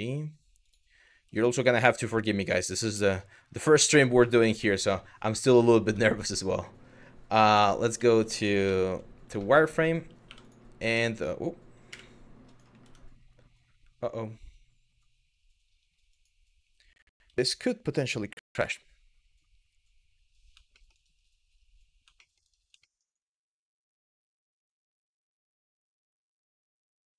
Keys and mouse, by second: 0.3 click, 2.0 click, 2.6 shift+middle drag, 4.0 shift+middle click, 5.5 Tab, 7.2 Tab, 7.8 Tab, 8.3 z, 9.1 shift+middle click, 10.2 2, 11.5 KP_1, 20.4 shift+middle click, 21.9 shift+middle click, 22.5 shift+middle click, 24.2 click.